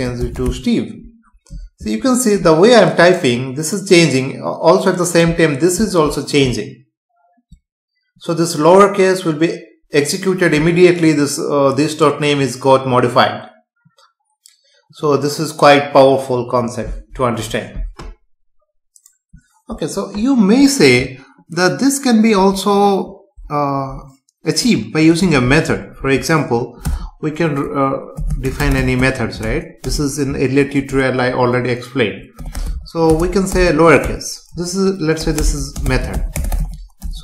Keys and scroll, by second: 26.8 Return, 29.8 space, 30.9 Return, 35.4 space.